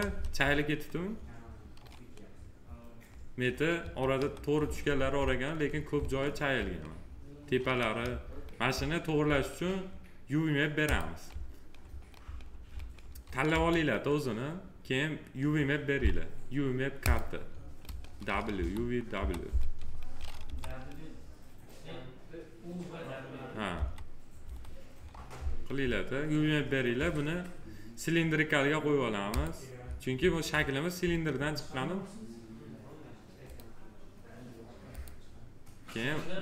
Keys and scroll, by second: 3.7 F4, 13.4 F4, 18.5 F4, 23.7 F4.